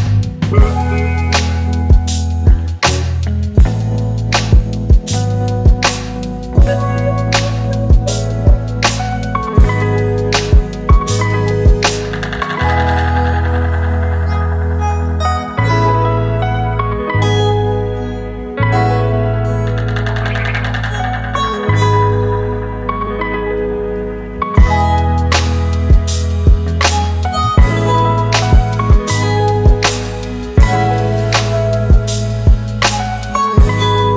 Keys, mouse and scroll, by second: 2.0 alt+shift+click, 2.6 alt+shift+click, 7.8 Return, 19.2 ctrl+t, 20.3 alt+shift+click, 22.2 Return, 26.9 double click, 28.6-29.9 typing.